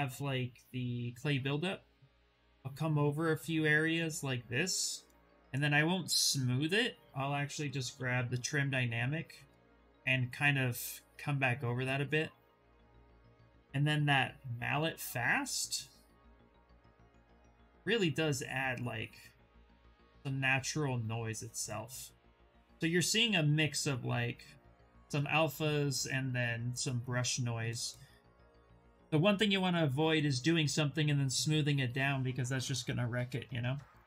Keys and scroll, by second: 0.2-1.1 typing, 7.2 b, 7.8 d, 17.4 ctrl+z, 17.5 ctrl+z, 28.9 s.